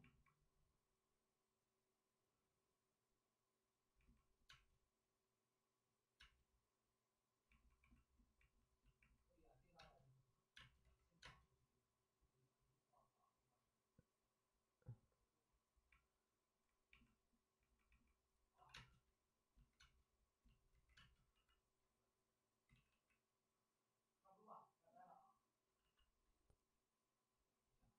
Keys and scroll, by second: 4.4 space, 6.2 space, 9.7 space, 10.5 space, 10.8 ctrl+z, 11.2 space, 16.7 space, 18.7 c, 18.7 space, 19.8 space, 20.7 ctrl+z, 20.9 space, 21.3 c, 22.6 ctrl+z, 25.8 c.